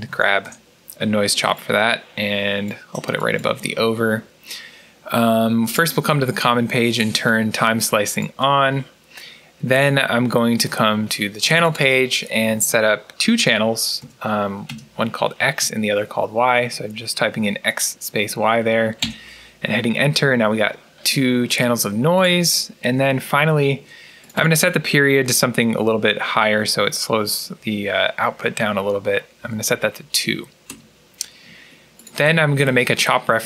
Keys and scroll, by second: 0.0-0.5 typing, 13.9 typing, 15.5 typing, 18.9 Return, 29.3 2, 30.6 Return.